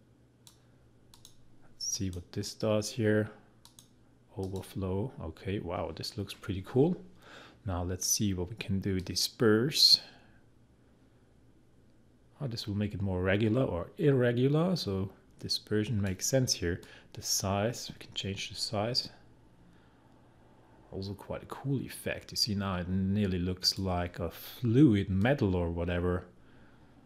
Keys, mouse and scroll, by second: 9.0-27.0 drag.